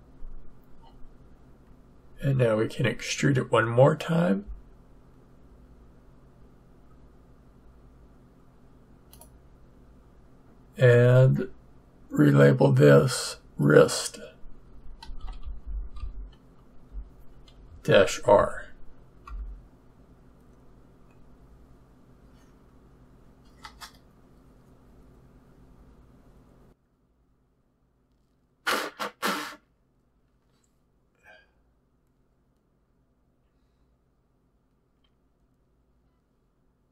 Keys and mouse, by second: 4.4 e, 13.1-14.9 drag.